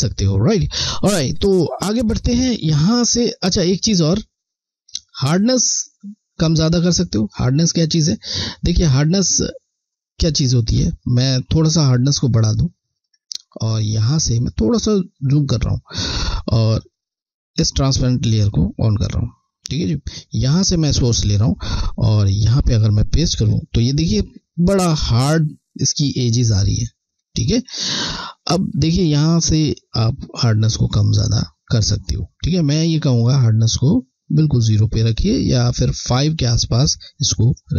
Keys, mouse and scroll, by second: 3.8 click, 6.3 click, 14.4 scroll, 15.1 alt+scroll up 1, 15.2 scroll, 15.6 alt+scroll up 1, 16.6 click, 20.3 click, 21.0 click.